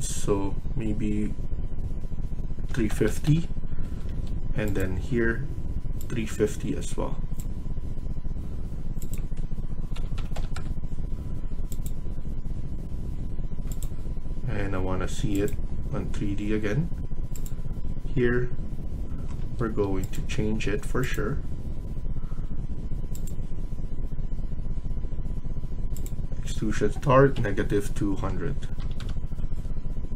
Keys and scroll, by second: 2.3-3.5 typing, 3.7 Escape, 4.0 Escape, 9.7-10.7 typing, 16.1 Escape, 19.3 Escape, 19.6 Escape, 27.2-28.6 typing.